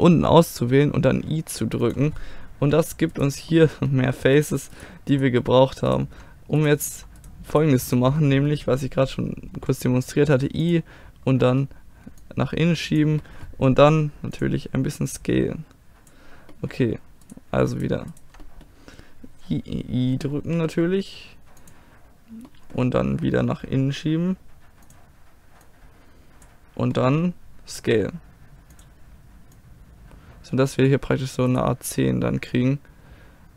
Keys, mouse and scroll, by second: 0.2 i, 2.6 a, 3.2 click, 3.5-9.9 middle drag, 9.6 i, 10.3-11.5 middle drag, 12.2-17.1 drag, 17.3-20.2 middle drag, 20.5 i, 22.5-24.9 middle drag, 24.9-27.8 drag, 28.8-31.5 drag, 32.0-33.5 middle drag.